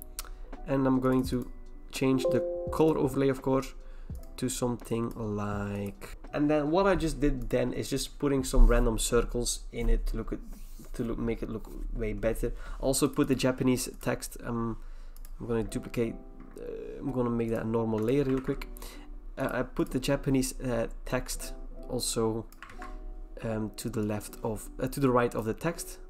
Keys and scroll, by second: 18.3 ctrl+e, 22.7 ctrl+v.